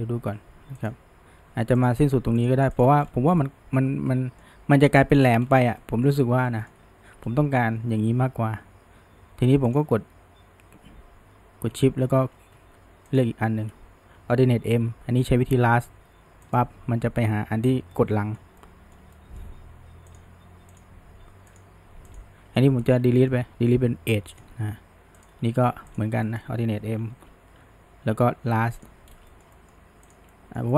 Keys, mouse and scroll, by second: 0.8 click, 1.8 shift+click, 2.4 click, 2.8 shift+click, 3.0-3.4 scroll down 2, 3.4-5.4 middle drag, 5.4-5.8 scroll up 1, 5.8 middle drag, 6.1-6.5 scroll up 1, 6.5-9.5 middle drag, 9.7 drag, 13.1 shift+drag, 14.5 alt+m, 18.0-20.1 middle drag, 20.1 drag, 21.5 click, 22.1 shift+drag, 22.6 middle click, 23.2 Delete, 25.2 drag, 25.9 shift+drag, 26.3 shift+middle click, 27.1 alt+m, 29.3-30.1 shift+middle drag, 30.1 drag, 30.3 middle click.